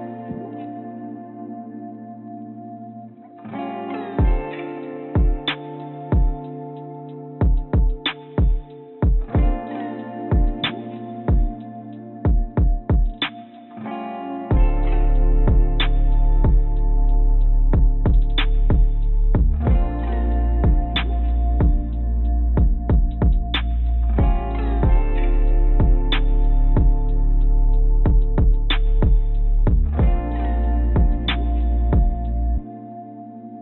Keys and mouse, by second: 0.5 shift+click, 1.0 shift+click, 1.8 shift+click, 2.7 click, 4.1 shift+click, 4.9 shift+click, 6.9-8.1 drag, 9.1 shift+click, 12.2 shift+click, 12.9 shift+click, 14.1-16.3 drag, 17.9 click, 18.8 shift+click, 19.5 shift+click, 19.8 shift+click, 20.3 shift+click, 20.8 shift+click, 21.4 shift+click, 22.4 shift+click, 23.9 click, 25.3 shift+click, 25.6 shift+click, 29.2 click, 29.2 right click, 31.2 shift+click, 32.0-33.6 drag, 32.0-33.0 right drag, 33.1 right click.